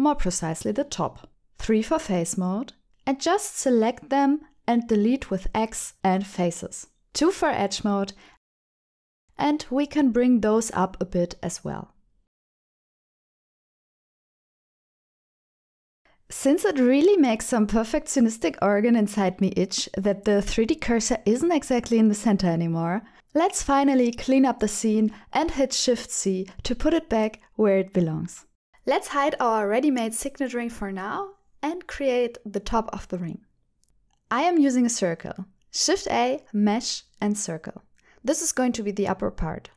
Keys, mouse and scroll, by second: 0.8 alt+z, 1.1 3, 1.6 click, 2.1 shift+click, 3.2 x, 5.0-6.1 middle drag, 6.3 middle click, 6.5 alt+z, 6.5 Tab, 7.2 alt+click, 8.0 2, 8.5 alt+click, 9.0 middle click, 9.6 click, 9.7 g, 9.7 z, 10.1 KP_3, 11.2 shift+middle click, 11.8 g, 12.0 z, 14.8 click, 15.4 shift+middle click, 16.1 n, 16.9 shift+middle click, 17.7 click, 19.0-21.1 middle drag, 21.6 middle click, 23.2 shift+c, 24.4 shift+middle click, 24.8-26.7 middle drag, 28.9 ctrl+s, 28.9 ctrl+alt+shift+p, 29.1 click, 29.3 middle click, 30.3 click, 31.5 h, 33.9 click, 34.6 middle click, 34.8 click, 35.1 middle click, 35.9 KP_7, 36.9 shift+middle click, 37.9 shift+a.